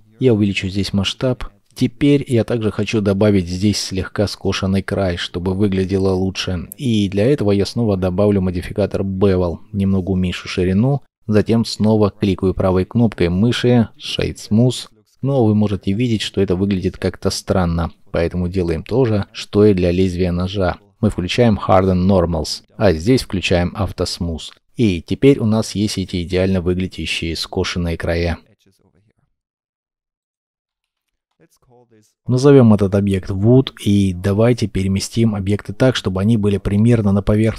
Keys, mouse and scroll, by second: 0.2 shift+middle click, 0.7 shift+middle click, 8.9 shift+click, 12.0 right click, 13.2-14.0 scroll down 1, 14.0 middle click, 16.1-16.4 scroll down 1, 16.4 middle click, 17.3-19.1 scroll, 19.1 middle click, 24.7-25.2 scroll down 1, 25.2 middle click, 28.8 middle click, 29.3 scroll down 1, 30.2 double click, 30.4-31.3 typing, 33.5 scroll up 1, 35.2 scroll up 1.